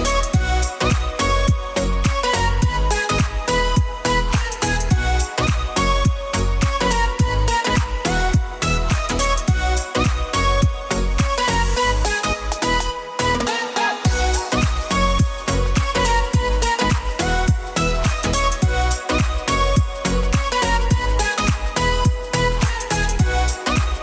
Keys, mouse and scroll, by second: 0.7 click, 1.2 drag, 2.2 drag, 2.7-4.1 middle drag, 4.8 shift+a, 5.9 KP_1, 6.8 shift+a, 8.5 n, 9.6 click, 10.1 click, 13.6-15.9 drag, 16.3-17.6 shift+middle drag, 17.6-18.1 shift+scroll down 1, 18.1 click, 19.5-20.0 drag, 20.5 drag, 20.8 drag, 21.2 drag, 21.8 drag, 22.2-23.0 drag, 23.9 click.